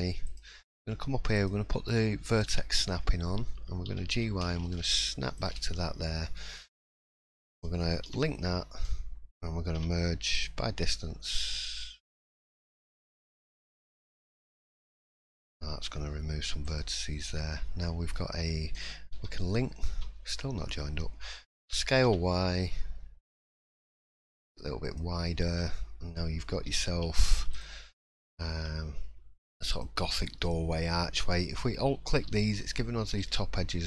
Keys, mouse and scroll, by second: 1.3 click, 3.9 g, 5.8-6.4 scroll up 3, 6.4 middle click, 6.9 shift+middle click, 8.0 l, 9.7 m, 12.6 click, 16.6 click, 17.1 middle click, 18.3-19.0 scroll down 1, 19.1 l, 20.4 middle click, 21.7 s, 25.2 middle click, 25.6 scroll up 1, 26.7 2, 27.5 alt+click, 29.7 alt+shift+click, 30.4 middle click.